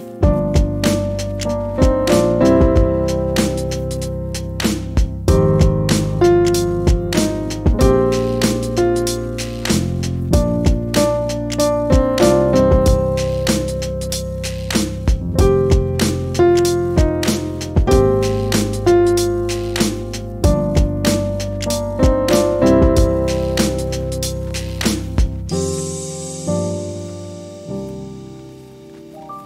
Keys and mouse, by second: 0.0-0.6 drag, 1.3 click, 2.9-5.3 typing, 6.0 F12, 7.9 click, 9.9 click, 10.3 click, 12.8 F12, 15.1 F12, 16.6 click, 17.8-19.0 drag, 20.2 click, 21.1 click, 21.6 click, 23.1-23.7 drag, 24.1 click, 25.2-26.0 drag, 26.5-27.1 drag, 28.7 click.